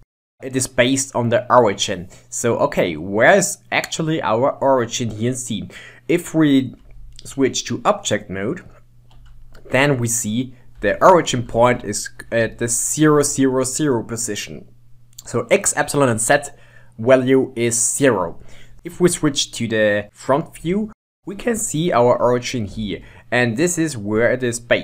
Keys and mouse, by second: 2.7-5.7 middle drag, 7.0 ctrl+Tab, 10.3-11.4 middle drag, 12.8-15.6 middle drag, 18.7-19.5 shift+middle drag, 20.9-22.9 shift+middle drag, 22.9 ctrl+Tab.